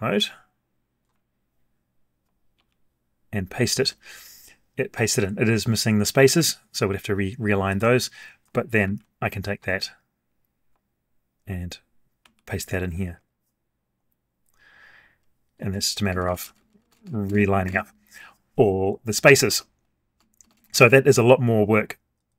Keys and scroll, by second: 2.5 ctrl+v, 8.8 ctrl+c, 12.2 ctrl+v.